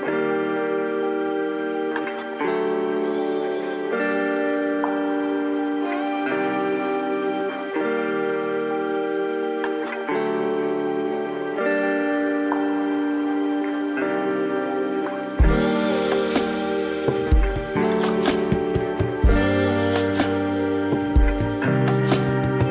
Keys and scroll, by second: 7.6 space, 9.2 ctrl+=, 9.5 ctrl+-, 18.2 space, 21.0 ctrl+-, 21.3 ctrl+=.